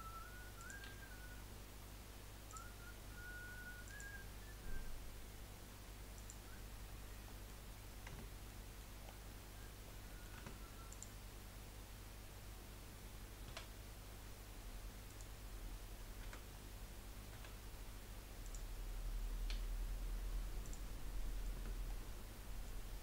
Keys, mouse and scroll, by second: 0.6 click, 0.8 g, 3.8 click, 4.2 g, 7.0-7.4 scroll down 3, 7.4 middle click, 7.8 scroll up 2, 8.1 Tab, 8.5-9.0 middle drag, 9.0-9.4 scroll up 3, 9.4-9.8 middle drag, 9.8 scroll down 3, 10.1 middle click, 10.4 Tab, 10.9 click, 13.4 s, 16.2 a, 17.5 s, 19.5 g, 21.2 middle click, 21.5 Tab, 21.8-23.0 middle drag.